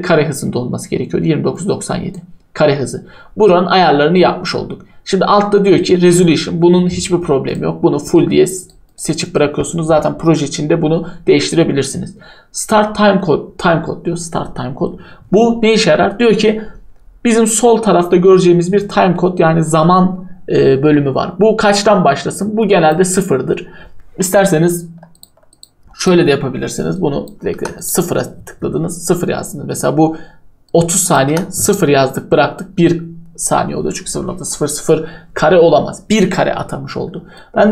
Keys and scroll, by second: 27.5 0, 31.3 0.